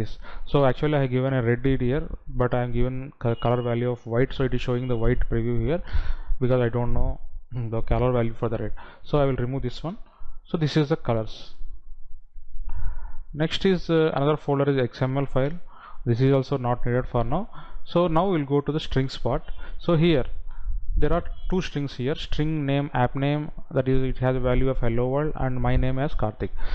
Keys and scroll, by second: 10.5 Delete.